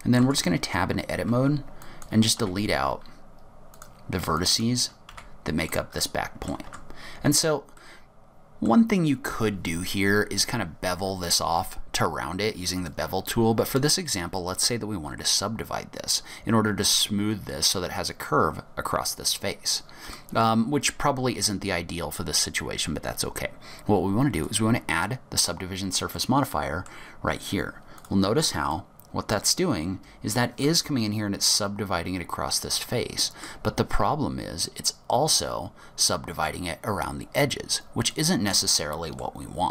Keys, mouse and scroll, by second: 0.3 Tab, 0.6 scroll up 3, 1.5 1, 1.9 click, 2.5 x, 4.5 click, 5.2 x, 6.1 middle click, 6.7 Tab, 7.0-7.5 scroll up 4, 7.6 scroll down 2, 7.9 middle click, 12.9 click, 13.5-14.5 scroll up 2, 20.1 click, 24.4 click, 26.3 middle click, 28.1 click, 28.8 middle click, 32.9 middle click, 38.2 middle click, 39.6 scroll down 3.